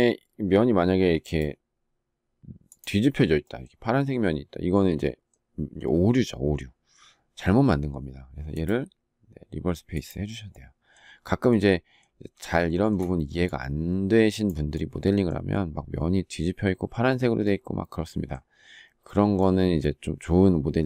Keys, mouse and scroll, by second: 12.3 shift+middle click.